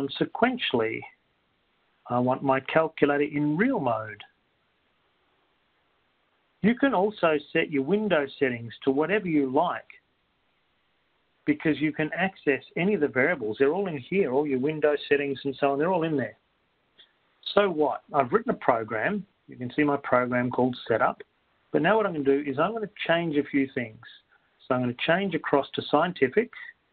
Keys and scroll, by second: 0.6 Return, 3.2-3.9 typing, 4.9 Down, 8.4 Return, 20.1 Down, 25.9 Down.